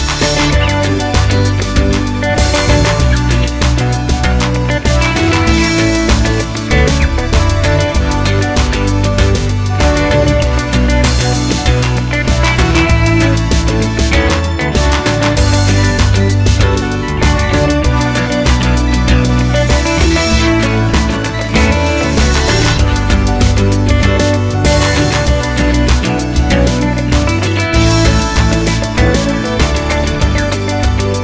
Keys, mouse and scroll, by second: 0.7 shift+a, 1.3 ctrl+z, 1.6 shift+c, 1.8 scroll up 1, 2.0 shift+middle click, 2.3 scroll down 1, 2.4 shift+a, 3.1 Tab, 3.2-5.5 scroll down 1, 5.5 click, 5.5 s, 6.7 Tab, 7.8 h, 8.7 KP_1, 11.6 middle click, 12.1 alt+h, 12.3 click, 12.8 g, 14.2-16.2 middle drag, 16.2 g, 16.2 click, 16.3-20.3 middle drag, 20.3 click, 23.0-24.4 drag, 26.5 click, 26.5 KP_0, 26.8 KP_Enter, 27.5 g, 29.7-30.7 scroll up 1, 30.7 click.